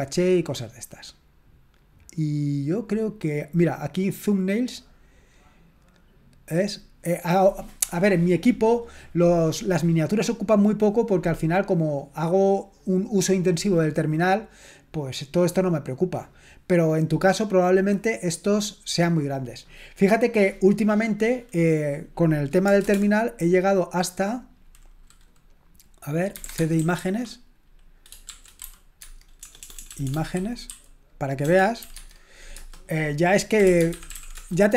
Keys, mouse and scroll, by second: 0.3 click, 4.7 click, 22.8 super+Return, 26.4 typing, 28.3-32.5 typing, 29.0 Tab, 33.5-34.7 typing.